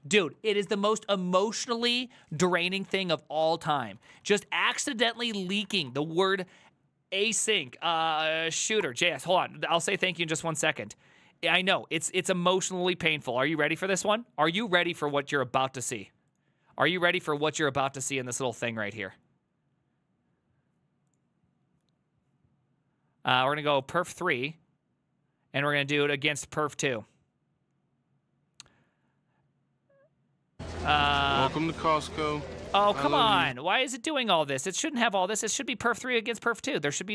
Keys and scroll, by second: 0.4 alt+h, 0.7 ctrl+t, 3.9-6.4 typing, 8.1-9.3 typing, 17.9 alt+f.